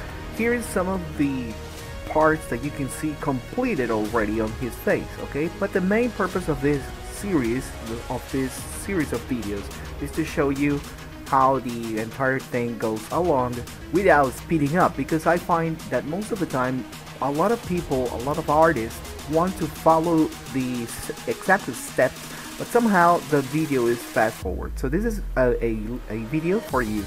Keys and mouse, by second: 0.6-1.9 middle drag, 2.4 shift+middle click, 3.2 alt+a, 4.8 ctrl+z, 5.8 click, 7.0 click, 7.7 click, 8.3 middle click, 9.7 ctrl+shift+click, 10.3 Tab, 11.3 shift+middle click, 11.6 middle click, 12.2 middle click, 12.7 middle click, 13.3 middle click, 13.9 middle click, 14.8 shift+middle click, 15.7 Tab, 16.5 alt+a, 16.6 middle click, 17.2 shift+middle click, 17.7 click, 19.3 click, 20.2-21.9 middle drag, 22.3 middle click, 23.2 middle click, 23.5 middle click, 24.2 shift+middle click, 25.0 ctrl+s.